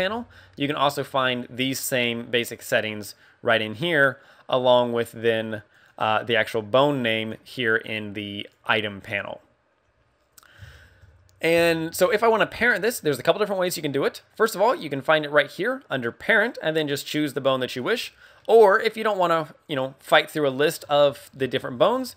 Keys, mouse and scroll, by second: 5.1 click, 5.7 click, 7.0 click, 7.2 click, 10.7 shift+middle click, 12.9 middle click, 14.5 click, 18.3 middle click, 19.6 click.